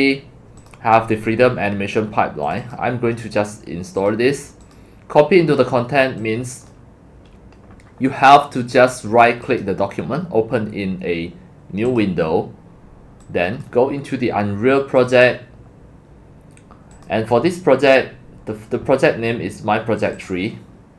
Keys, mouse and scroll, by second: 0.6 click, 2.5 click, 2.6 click, 4.0 click, 4.6 click, 6.6 click, 6.9 click, 8.3-9.6 drag, 11.9 click, 13.3 click, 15.3 click, 17.1 click, 20.0 click, 20.1 click.